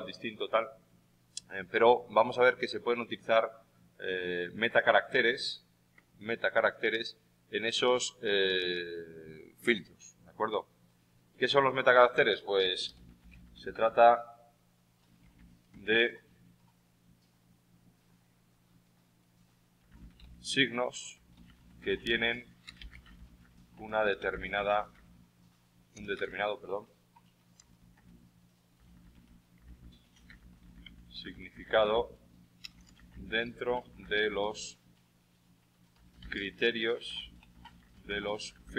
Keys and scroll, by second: 12.6-14.1 typing.